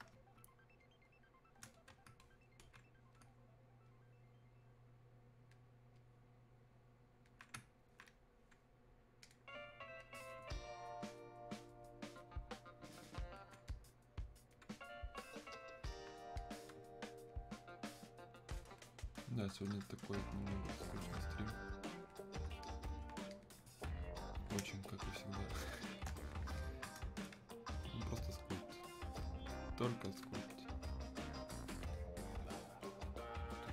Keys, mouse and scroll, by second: 0.2 space, 1.8-22.7 drag, 24.6 space, 25.2 click, 25.5 space, 26.6-33.7 alt+drag.